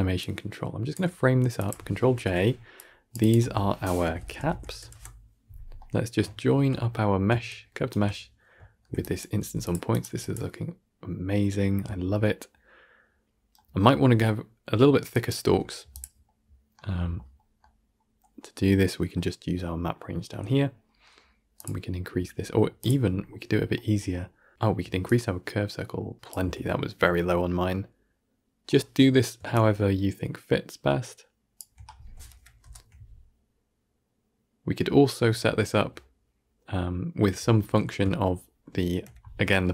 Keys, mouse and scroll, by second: 0.1 click, 2.0 ctrl+j, 3.2 click, 4.8 F2, 7.8-8.9 ctrl+shift+right drag, 8.9 click, 9.8 drag, 10.5-15.0 middle drag, 15.0 drag, 21.6-27.2 drag, 27.2-29.7 middle drag, 29.7-32.2 shift+drag, 32.2 shift+Left, 32.5 shift+space, 37.7 shift+space, 38.9 shift+Left, 39.5-39.7 shift+middle drag.